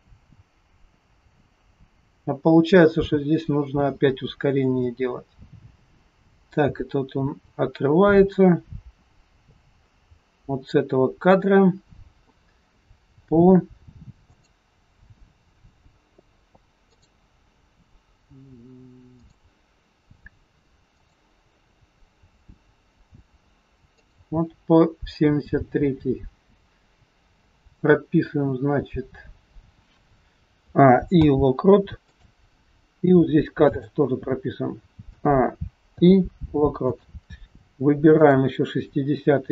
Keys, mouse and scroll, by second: 14.3 click, 16.9 click, 19.3 click, 21.0 click, 24.0 click, 27.6 click, 30.5 a, 31.2 i, 33.6 click, 35.0 a, 35.9 i, 38.3 click, 39.4 a.